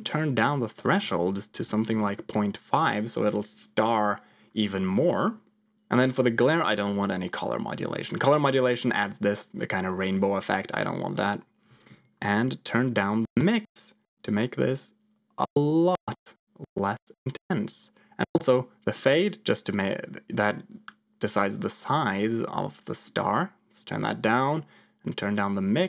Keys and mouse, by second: 0.8-1.8 drag, 6.6-11.3 drag, 12.9-18.4 shift+drag, 18.8-23.1 drag, 24.0-25.8 shift+drag.